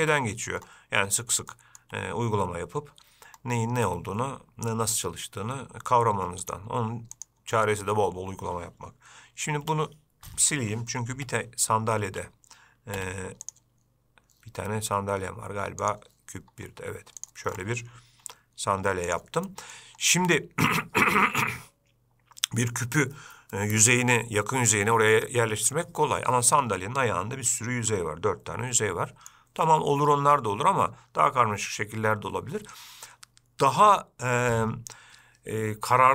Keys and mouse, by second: 0.2 Tab, 1.7 shift+middle click, 6.6 click, 7.4 click, 9.9 g, 13.2 x, 16.0 click, 18.5 g, 19.7 middle click, 20.6 shift+middle click, 27.0-29.5 middle drag.